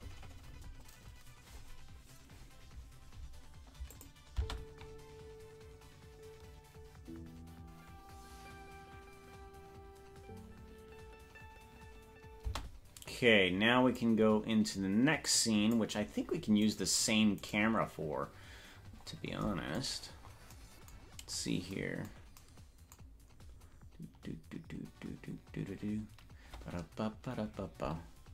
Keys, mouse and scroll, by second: 4.0 click, 4.4 space, 12.6 space, 14.0-15.8 drag, 16.9 right click, 17.7 right click, 18.9-19.3 scroll up 5, 20.3 scroll up 1, 21.3-21.7 scroll up 3.